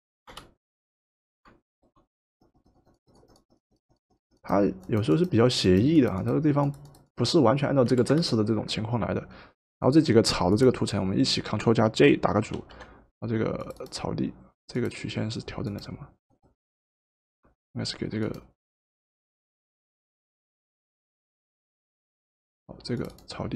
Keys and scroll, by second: 0.2 Return, 7.9 v, 12.5 ctrl+g.